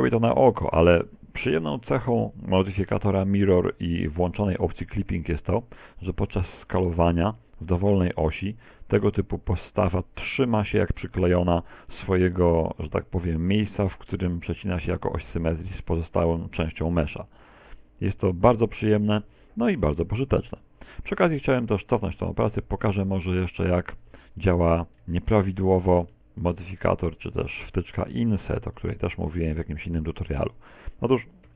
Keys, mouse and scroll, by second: 2.5 click, 6.6 shift+middle click, 8.9 middle click, 9.6 middle click, 10.6 s, 20.0 middle click, 20.6 middle click, 24.8 ctrl+z, 25.0 ctrl+z, 25.3 ctrl+z, 25.8 Tab, 26.2 z, 26.9 Tab, 28.2 ctrl+z, 30.8 shift+middle click.